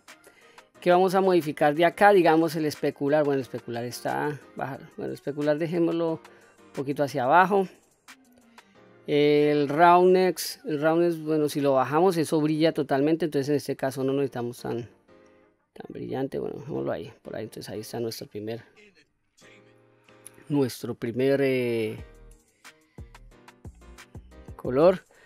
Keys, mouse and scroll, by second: 0.5-2.0 scroll down 4, 2.8-5.6 drag, 6.2 click, 7.6-10.2 scroll down 2, 10.7-16.3 drag, 16.9-17.3 scroll down 1, 17.3 middle click, 18.5-19.6 scroll up 5, 19.6-20.4 scroll up 1, 20.4 middle click, 21.8-23.1 middle drag, 23.5-23.9 scroll up 3, 23.9-24.6 scroll down 2, 24.6 middle click.